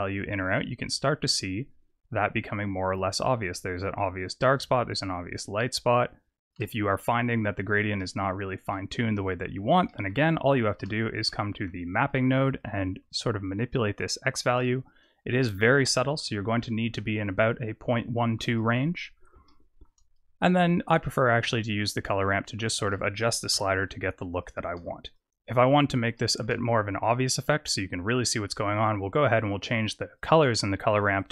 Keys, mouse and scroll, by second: 3.7 click, 7.9 middle click, 8.8-9.6 scroll up 3, 9.6 scroll up 2, 9.8 shift+middle click, 10.9 scroll up 2, 11.2 middle click, 11.8 scroll up 2, 12.5 shift+click, 14.6 click, 19.4 shift+middle click, 20.9 shift+click, 23.5 KP_0, 24.7 KP_0, 25.4 scroll up 3, 26.1 shift+middle click, 26.6-27.0 scroll down 2, 29.3 click, 31.1 click.